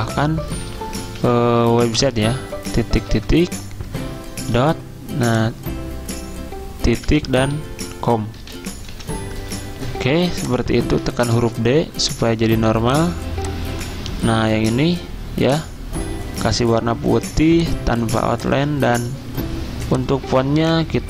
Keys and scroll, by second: 1.2 t, 3.1 typing, 4.6 ., 7.1 ., 8.2-9.9 typing, 11.1 d.